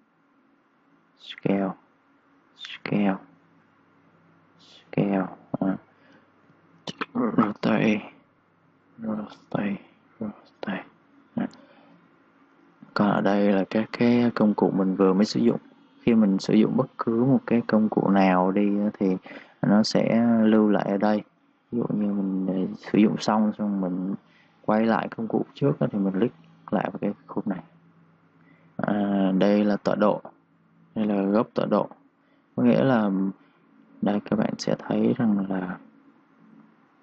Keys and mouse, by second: 1.9 ctrl+z, 2.3 click, 4.0 ctrl+z, 4.0 typing, 4.6 click, 5.6 ctrl+z, 5.6 typing, 6.4 click, 19.0 right click, 19.0 typing, 19.9 click, 30.0 click, 35.2-37.0 typing, 36.4 click.